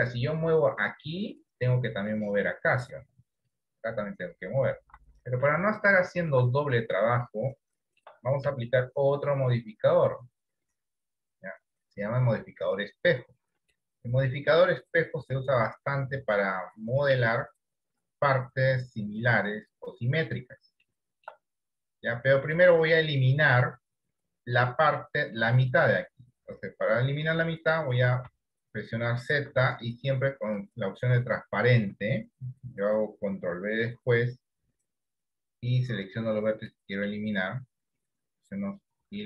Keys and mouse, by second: 3.6 click, 5.1 ctrl+z, 6.0 shift+middle click, 7.4 shift+middle click, 8.8-9.8 shift+middle drag, 13.8-16.4 shift+middle drag, 20.9 shift+middle click, 27.5 z, 29.6 z, 34.0 ctrl+b, 35.4-36.8 drag.